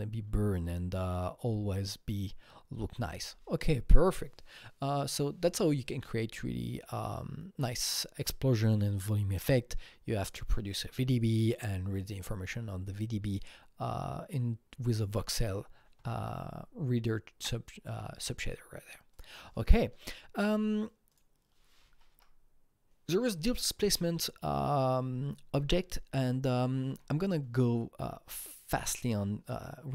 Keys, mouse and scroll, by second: 19.1 KP_Enter, 19.1 click, 20.4 click, 21.1 click, 22.1 Right, 26.8 Escape.